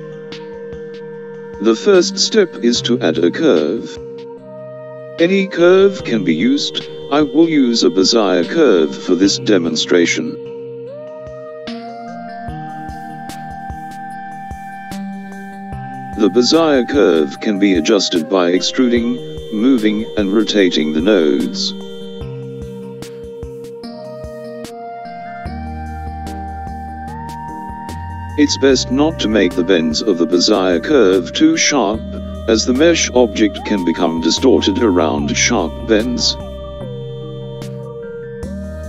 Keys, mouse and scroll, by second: 7.8 Tab, 10.2 click, 14.2 e, 19.2 click, 21.1 r, 27.4 click, 29.1 g, 32.7-35.7 middle drag, 36.2 click.